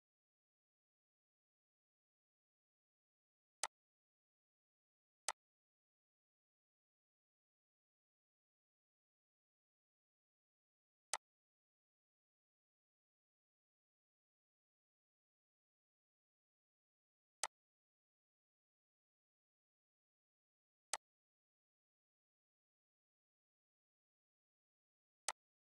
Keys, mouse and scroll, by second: 2.2 right click, 3.6-8.8 drag, 11.1-17.4 drag, 17.4-19.6 drag, 19.6 right click, 21.1 click, 25.3 click.